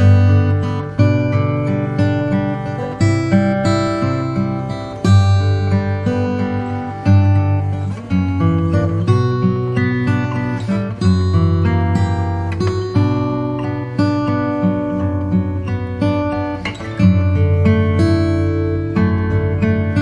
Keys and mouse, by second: 0.0 e, 7.5 ctrl+r, 9.7 ctrl+b, 15.1 click, 16.5-20.0 middle drag.